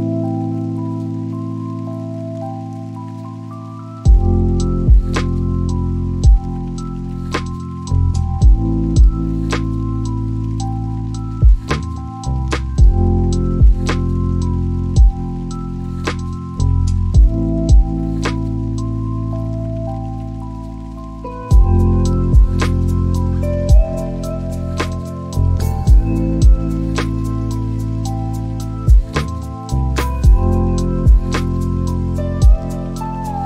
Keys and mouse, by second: 1.5-5.3 drag, 6.0 click, 8.3 click, 11.0 click, 12.9 click, 13.6 click, 13.8 click, 14.1 click, 14.2 click, 14.6 click, 14.9 click, 15.1 click, 15.3 click, 19.8 click, 21.2-22.4 drag, 30.5 click.